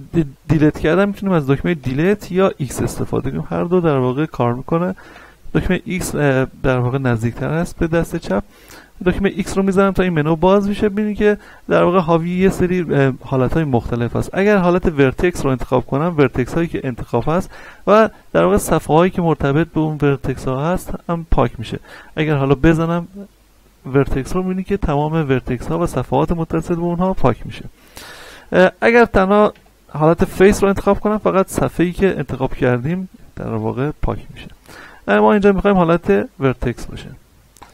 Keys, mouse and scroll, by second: 1.8 Delete, 7.6 x, 9.3 x, 11.2-22.2 drag, 22.2 x, 23.9 click, 28.3 ctrl+z, 29.5 x, 30.8 click, 32.0 z, 33.2-34.7 middle drag, 35.0 ctrl+z, 35.9 x, 37.6 click.